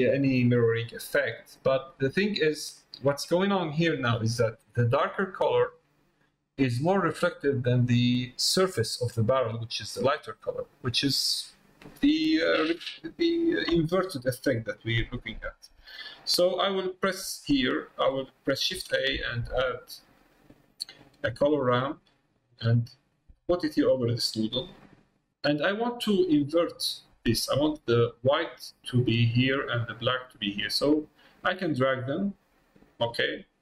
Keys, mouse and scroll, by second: 2.3 middle click, 3.4 middle click, 16.1 middle click, 31.6 click, 32.6-33.6 drag.